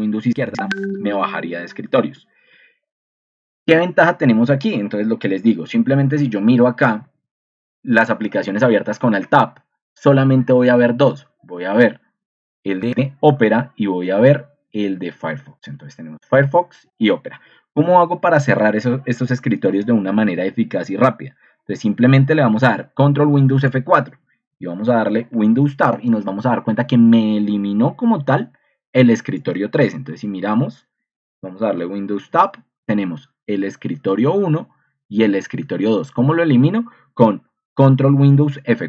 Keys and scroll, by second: 5.6 alt+Tab, 6.9 alt+Tab, 10.3 alt+Tab, 11.5 alt+Tab, 13.4 alt+Tab, 15.0 alt+Tab, 16.3 alt+Tab, 23.8 super+F4, 25.2 super+Tab, 30.2 ctrl+2, 32.3 ctrl+2.